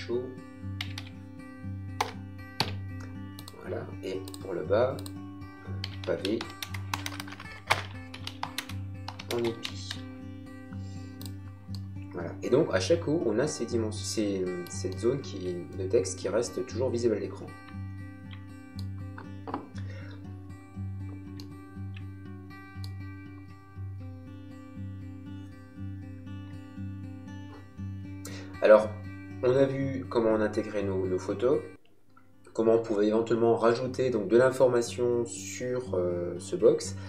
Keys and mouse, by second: 0.0-2.5 typing, 3.4 click, 5.5-10.1 typing, 11.7 middle click, 14.9 shift+middle click, 17.6 shift+middle click, 21.3 shift+middle click.